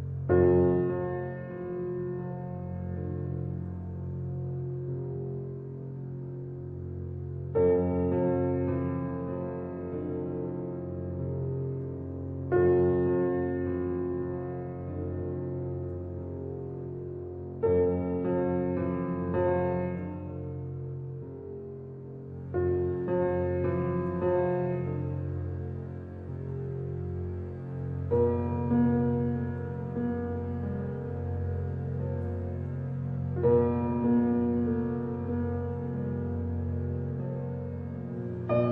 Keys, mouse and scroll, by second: 1.0 h, 1.5 click, 1.9 h, 2.6 click, 3.2-4.0 middle drag, 4.0-5.3 scroll up 2, 5.4-8.5 middle drag, 8.5-9.1 shift+scroll up 1, 9.1-12.2 middle drag, 12.2 Tab, 12.7-13.9 middle drag, 13.9-15.1 drag, 15.4-15.8 scroll down 1, 15.8 middle click, 16.4 KP_1, 17.4 KP_3, 18.3-19.1 scroll down 2, 19.1-20.5 shift+middle drag, 20.5 click, 29.5 ctrl+click, 30.4 ctrl+click, 31.9 ctrl+click, 33.3 click, 35.1 ctrl+click, 38.1 shift+d.